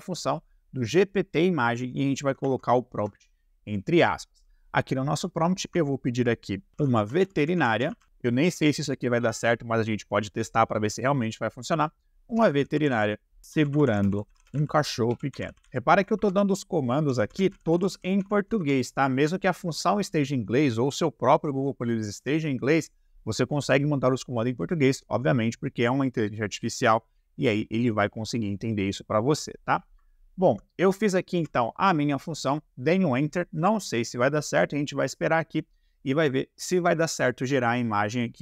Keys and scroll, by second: 2.4 shift+`, 6.7-8.0 typing, 12.3-18.6 typing, 30.4 shift+0, 31.3 Return.